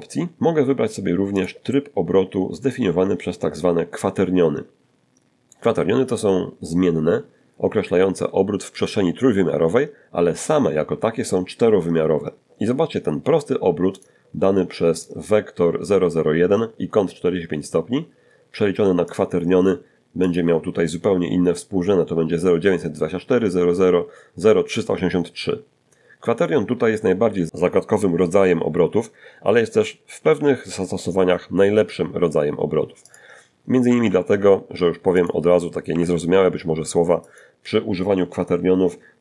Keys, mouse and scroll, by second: 4.3 click, 12.2 click, 13.2 click, 17.3 click, 18.4 click, 28.4 r, 29.1 r, 31.3 click, 32.0 r, 32.2 r, 33.4 click, 34.1 r, 34.3 r, 35.4 click.